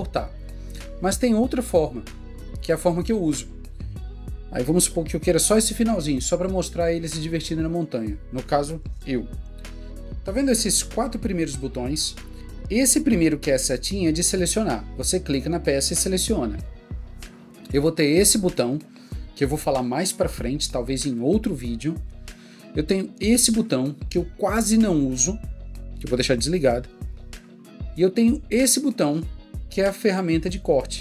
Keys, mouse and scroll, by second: 18.6 click, 29.3 click.